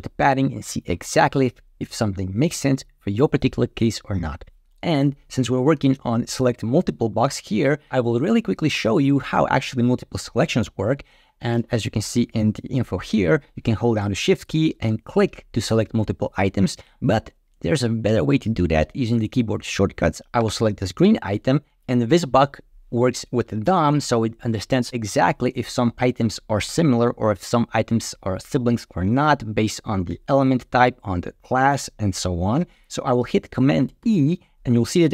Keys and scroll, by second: 4.4 Down, 7.0 Up, 33.9 super+e.